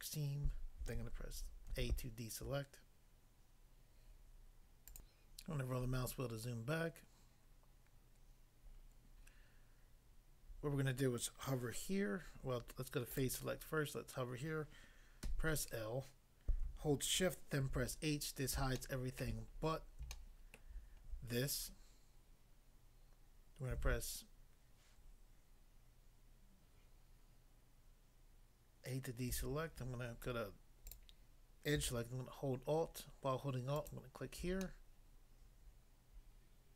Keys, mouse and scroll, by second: 1.7 a, 4.9 click, 5.1 click, 5.4 scroll down 1, 5.9-6.7 scroll down 1, 13.2 click, 16.5 l, 17.7 h, 18.1 scroll up 1, 18.7 shift+middle click, 19.6 scroll up 1, 20.1 shift+middle click, 21.0 shift+scroll up 1, 23.7 a, 30.9 click, 31.0 click, 33.7 alt+click, 34.6 middle click.